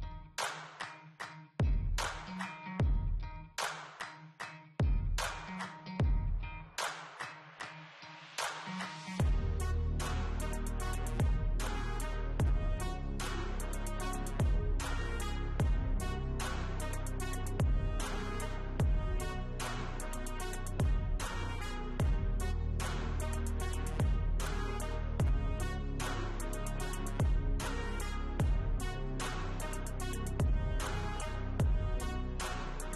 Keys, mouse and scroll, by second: 14.1-15.9 scroll up 1, 30.5-32.3 scroll down 1.